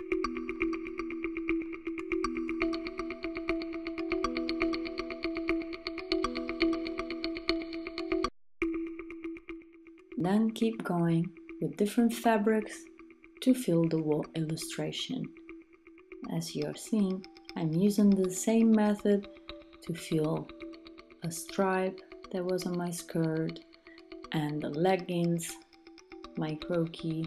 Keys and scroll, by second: 13.9 Return, 15.8 super+d, 16.8 Return, 17.3 Return, 23.2 Return.